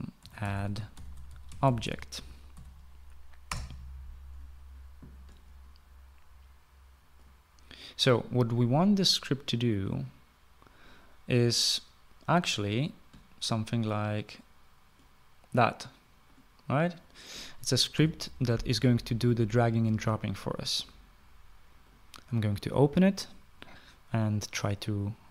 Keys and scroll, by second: 0.3-3.3 typing, 3.8 Return, 18.3 Delete.